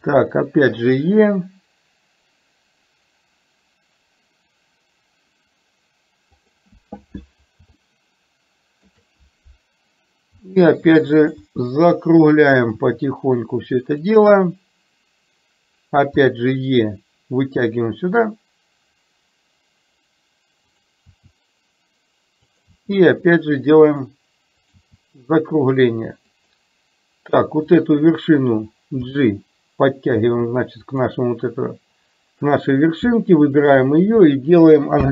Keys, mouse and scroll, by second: 0.1 e, 7.8-8.9 shift+middle drag, 10.3 e, 11.4 e, 16.2 e, 21.2 e, 22.8 e, 27.7 click, 29.1 g, 34.9 m.